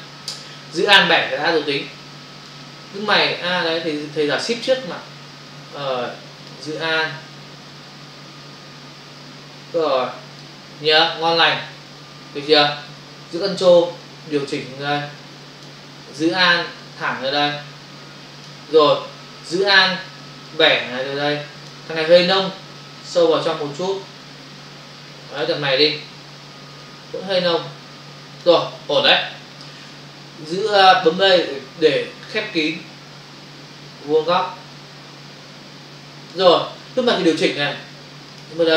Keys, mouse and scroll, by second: 4.6 alt+click, 8.4 alt+click, 14.0 ctrl+click, 16.8 alt+click, 20.5 alt+click, 22.8 ctrl+click, 26.9 ctrl+click, 29.8 space, 32.6 click, 38.3 ctrl+click, 38.4 ctrl+click.